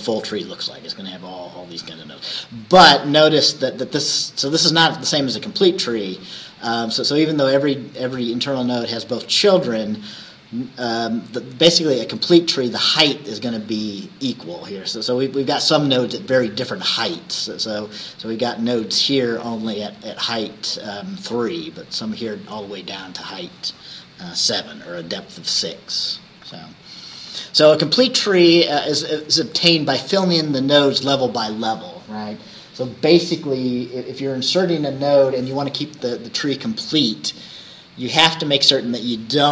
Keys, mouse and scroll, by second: 27.2 Right.